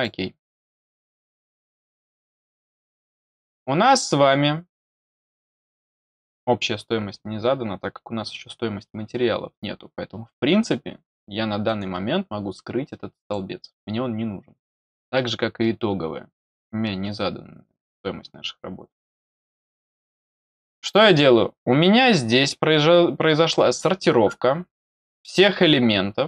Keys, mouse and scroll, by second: 3.1-3.6 scroll down 2, 4.1 scroll down 1, 4.6-5.5 scroll up 4, 6.5-7.8 scroll down 2, 7.8-8.7 scroll up 1, 8.8-9.1 scroll down 1, 11.0 click, 11.6 right click, 13.2 click, 15.1 right click, 19.2 click, 20.1 scroll up 1, 20.7-22.3 scroll down 4, 22.3 scroll up 1, 22.5-23.1 scroll down 1.